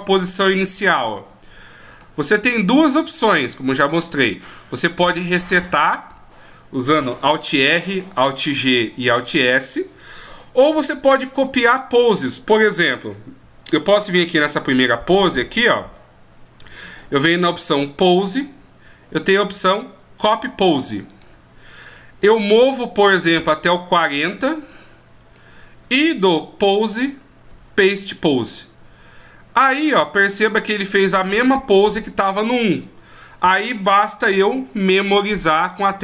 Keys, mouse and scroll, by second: 14.4 click, 18.1 click, 22.8 click, 26.6 click, 35.9 i.